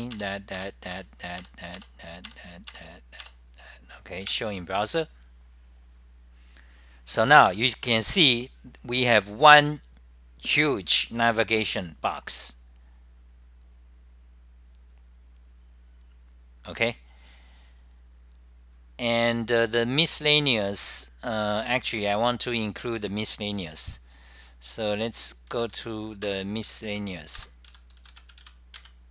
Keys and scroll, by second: 0.0-0.4 typing, 3.7-4.5 typing, 5.8-6.5 typing.